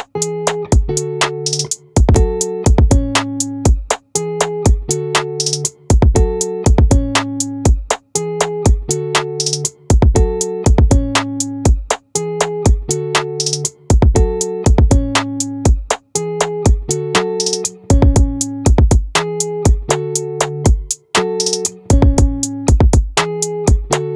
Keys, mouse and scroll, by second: 2.6-5.3 right drag, 5.3 middle click, 11.8 ctrl+r.